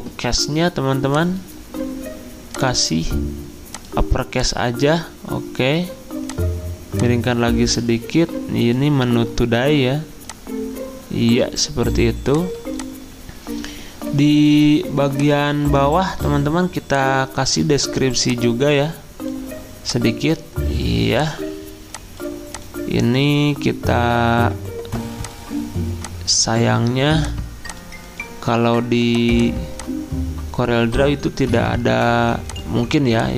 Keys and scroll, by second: 31.5 Delete.